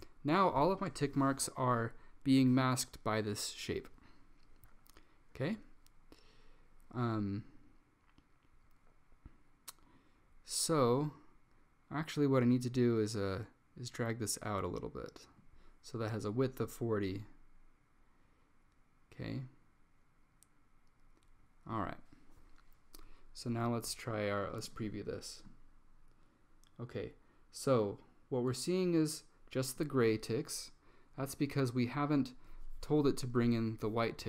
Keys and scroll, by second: 1.7 typing.